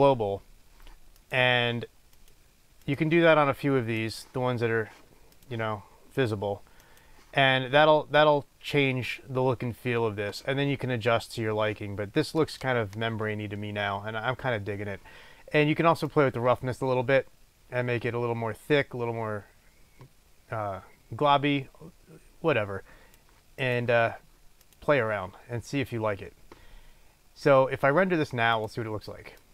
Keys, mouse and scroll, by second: 2.2-4.3 drag, 5.5 click, 6.3-23.9 drag, 24.7 click, 28.6 click.